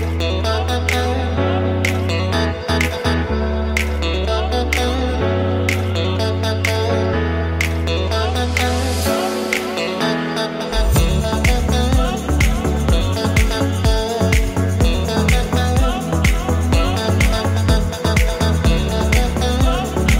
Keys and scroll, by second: 4.0 Escape, 4.8-5.9 typing, 7.5 ctrl+=, 8.6 Up, 9.0 Down, 11.3 Down, 11.4 Left, 17.1 ctrl+0.